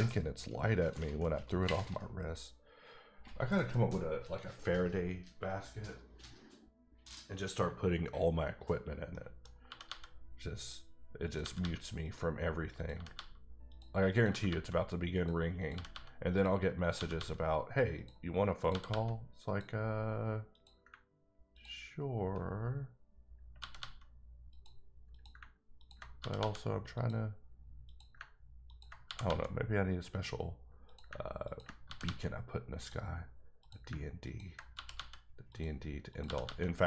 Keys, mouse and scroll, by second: 9.1 scroll up 1, 9.4 middle click, 9.6 g, 9.8 g, 10.6 click, 11.2 click, 11.4 g, 11.6 g, 12.0 click, 12.7 click, 12.9 g, 13.1 g, 13.7 click, 14.1 click, 14.2 g, 14.4 g, 15.1 click, 15.6 click, 15.7 g, 15.9 g, 16.3 click, 16.8 click, 16.9 g, 17.1 g, 17.9 click, 18.6 click, 18.7 g, 18.9 g, 19.4 click, 20.5 click, 21.5 ctrl+click, 22.4 click, 23.6 g, 23.8 g, 24.5 click, 25.1 click, 25.8 ctrl+click, 26.2 g, 26.3 g, 26.9 click, 27.8 click, 28.7 click, 29.0 g, 29.2 g, 30.1 click, 30.8 click, 31.4 ctrl+click, 31.8 g, 32.0 g, 32.7 click, 33.6 click, 34.2 ctrl+click, 34.7 ctrl+g, 35.5 click, 36.1 click, 36.2 g.